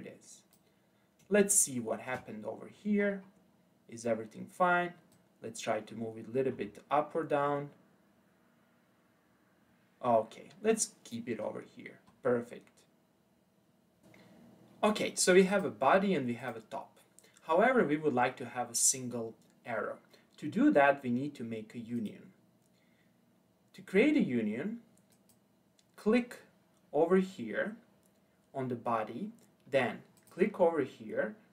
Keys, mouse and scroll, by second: 1.5-2.4 shift+middle drag, 2.4-5.1 scroll up 8, 5.1 click, 11.5-14.0 scroll down 9, 15.5 click, 16.4 click, 20.9-22.0 scroll down 1, 22.0 click, 25.1 click, 30.2 click.